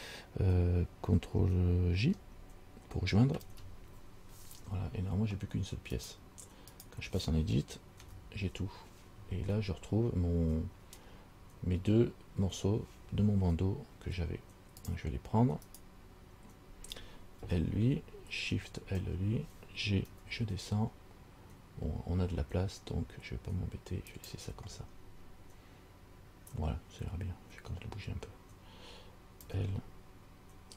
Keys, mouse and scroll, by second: 3.5 ctrl+j, 6.2 right click, 7.1 right click, 8.2 Tab, 11.0-11.4 scroll up 1, 15.0 click, 15.9 right click, 17.6 l, 19.0 shift+l, 20.3 g, 25.1-28.6 scroll up 2, 29.6 l.